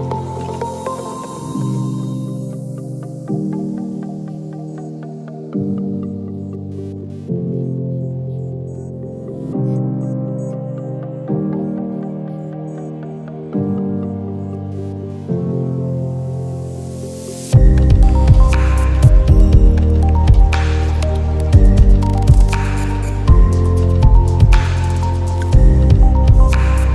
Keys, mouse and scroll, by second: 0.1 space, 0.6 click, 0.6 click, 0.7 space, 1.7 click, 4.6 click, 4.6 ctrl+z, 4.9-12.8 drag, 14.0 i, 14.2 click, 15.1 i, 15.3 click, 17.0 i, 17.1 click, 18.8 i, 19.1-23.2 drag, 25.2 i, 25.4-26.9 drag.